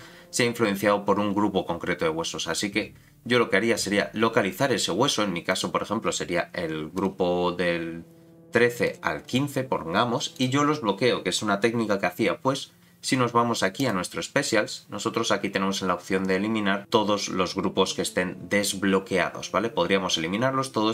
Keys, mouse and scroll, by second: 3.2-3.9 scroll down 5, 3.9-5.5 scroll down 2, 5.5 click, 5.5 scroll down 2, 6.9 click, 8.8 click, 9.3 click, 10.3 click, 13.8-20.9 drag.